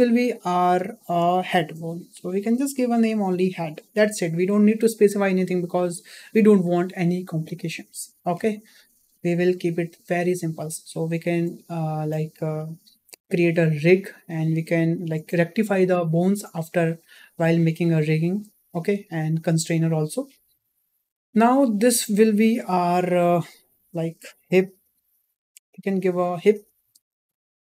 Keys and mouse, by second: 0.9 shift+middle click, 1.7 click, 19.1 shift+middle click, 20.7 shift+middle drag, 21.7 shift+middle drag, 24.4 click.